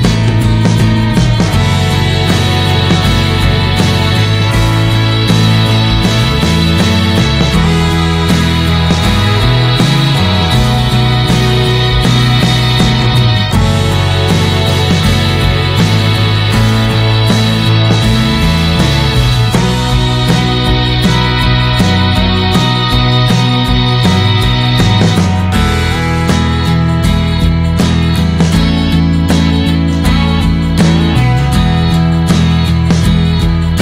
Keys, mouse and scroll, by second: 4.8 click, 5.8 middle click, 6.7-7.5 scroll up 2, 7.5-9.9 drag, 13.0 click, 14.0-15.5 drag, 15.5 scroll down 1, 15.7-16.9 middle drag, 16.9-19.7 drag, 20.3-22.7 drag, 25.1 ctrl+z, 26.2 alt+middle click, 26.9 scroll down 2, 27.1 shift+middle click, 27.3 scroll up 1, 27.7 r, 28.5 s, 29.9 click.